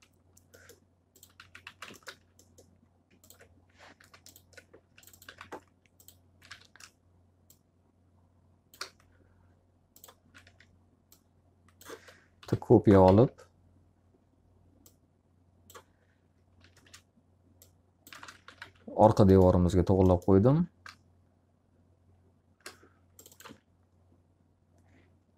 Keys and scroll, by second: 0.0-2.1 typing, 3.9 ctrl+z, 4.5-6.4 typing, 10.3 w, 12.3 l, 13.0 z, 16.6 space, 18.1-19.0 typing, 22.9 alt+a.